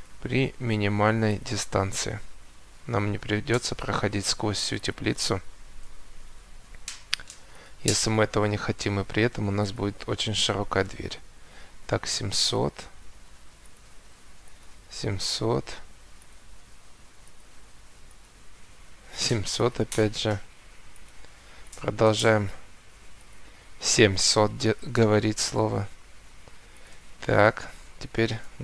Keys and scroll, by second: 5.5 Escape.